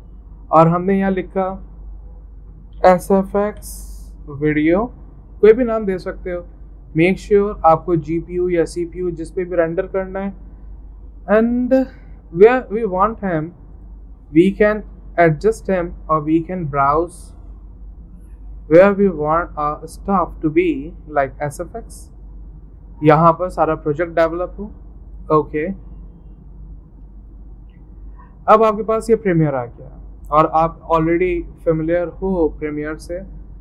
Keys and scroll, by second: 2.8-5.1 typing.